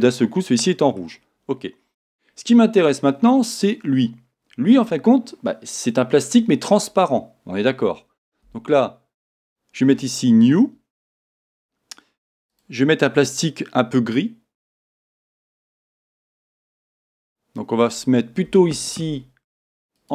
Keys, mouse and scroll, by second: 0.0-2.3 middle drag, 2.0 scroll down 2, 2.7 scroll up 1, 3.5 click, 9.4-10.7 drag, 12.5 click.